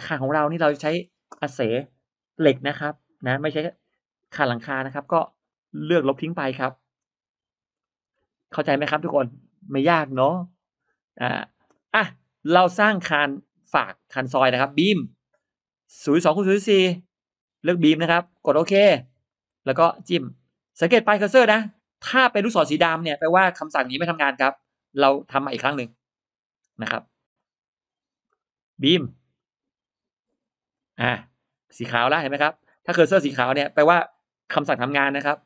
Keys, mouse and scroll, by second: 0.4-0.7 scroll down 1, 0.6 middle click, 3.6 middle click, 4.8 space, 5.4 click, 6.5 middle click, 7.4 Delete, 7.7 middle click, 7.8 scroll up 1, 8.0 scroll down 1, 8.2-8.6 scroll up 1, 12.2 click, 14.5 click, 18.1 click, 19.1-19.9 scroll up 2, 19.2 middle click, 24.3 click, 27.2 click, 28.2-29.2 drag, 29.2 click, 30.2 click, 32.0 scroll up 1, 32.0 middle click.